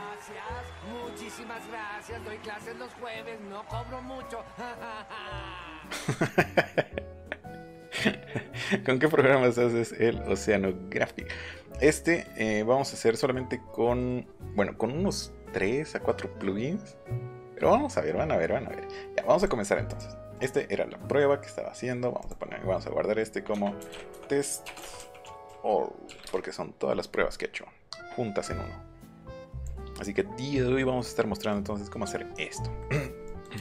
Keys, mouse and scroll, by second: 12.0 middle click, 13.0-14.0 middle drag, 14.4 middle click, 17.5 middle click, 17.7 middle click, 19.3 click, 19.8 click, 20.3 click, 22.2 click, 23.5 Caps_Lock, 23.8 t, 24.6 BackSpace, 24.9 -, 25.4 l, 26.2 Return, 29.0 click, 29.6 click, 33.3 click.